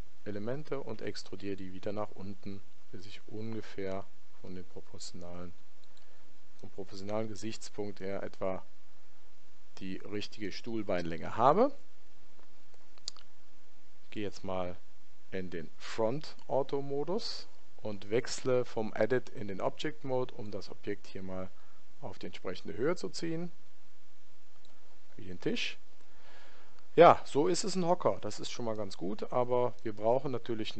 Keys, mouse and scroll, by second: 6.5-8.5 middle drag, 19.1 Tab, 20.4 click, 28.7-30.7 middle drag.